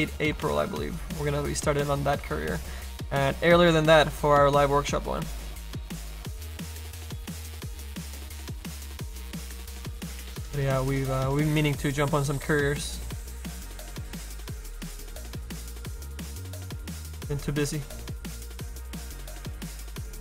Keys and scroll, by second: 6.7 ctrl+z.